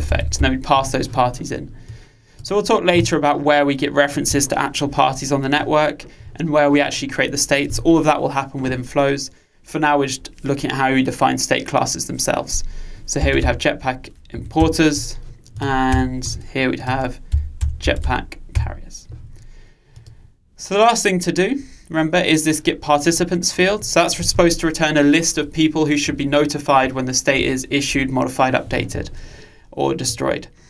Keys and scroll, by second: 14.6 Return.